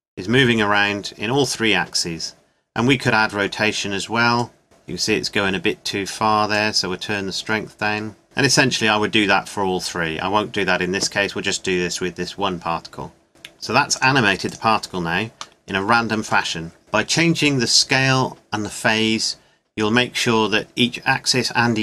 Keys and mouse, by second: 4.4 click, 6.6-8.4 middle drag.